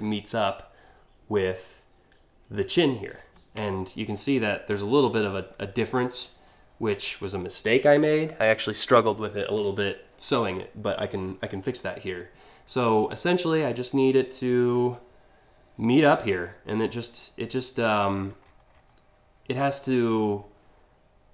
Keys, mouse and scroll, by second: 2.7 scroll up 1, 3.3 alt+scroll up 1, 3.7-4.5 alt+scroll, 13.1-15.6 drag, 17.7-18.4 scroll up 3.